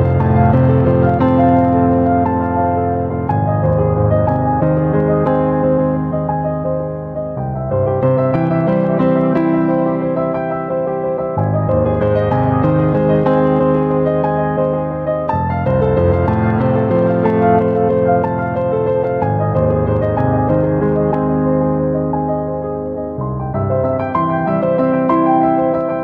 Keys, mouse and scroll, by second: 1.3 click, 2.0 q, 2.8 shift+middle click, 4.3 shift+middle drag, 4.8 shift+middle click, 5.8 shift+middle click, 6.1 s, 7.8 click, 9.9 g, 10.0 middle click, 10.5 g, 10.7 middle click, 10.8 click, 12.2 click, 13.1 shift+middle click, 14.4 shift+middle click, 15.2 click, 16.4 shift+middle drag, 17.0 shift+middle click, 17.6 shift+middle click, 18.0 shift+middle click, 19.8 shift+middle click, 20.2 shift+middle click, 20.7 click, 21.1 shift+middle click, 21.7 q, 21.9-22.3 drag, 22.6 g, 24.6 click, 25.3 click.